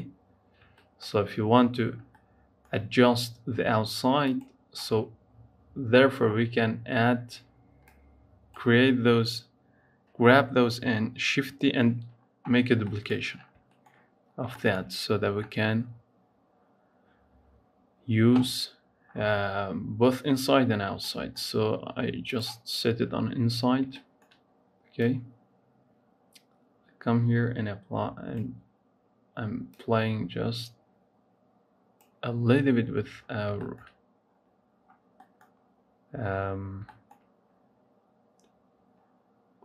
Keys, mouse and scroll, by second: 0.2-0.6 scroll down 2, 0.6 shift+middle click, 1.6-2.1 scroll down 2, 2.1-4.1 middle drag, 4.1 click, 5.2 scroll down 3, 5.7-7.7 scroll down 8, 7.7 click, 18.9-19.2 scroll up 6, 21.0-22.2 shift+middle drag, 22.2 click, 23.8-24.8 shift+middle drag, 24.8-27.8 drag, 29.6-32.4 drag, 32.4-33.1 scroll down 9, 33.1 scroll up 4, 33.4 shift+middle click, 33.7-34.1 scroll up 3, 34.1-35.1 scroll down 8, 35.1 middle click, 36.1 scroll up 3, 36.7-39.5 shift+middle drag, 39.5-39.6 scroll up 3.